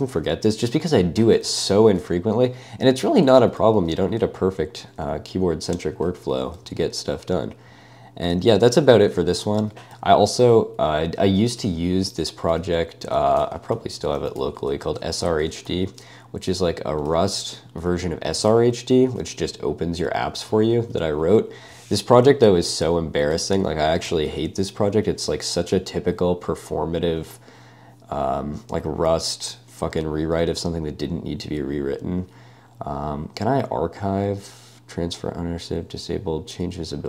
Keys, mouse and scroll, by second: 0.0-3.0 typing, 3.4 ctrl+d, 3.6 ctrl+d, 3.8 ctrl+d, 4.0 ctrl+d, 6.2 ctrl+u, 6.3 ctrl+u, 6.6 ctrl+d, 7.8 ctrl+d, 8.3 ctrl+u, 8.6 ctrl+u, 9.4 ctrl+d, 9.9 typing, 13.2 alt+a, 13.5-16.2 typing, 17.1 super+1, 17.4 super+w, 18.2-24.2 typing.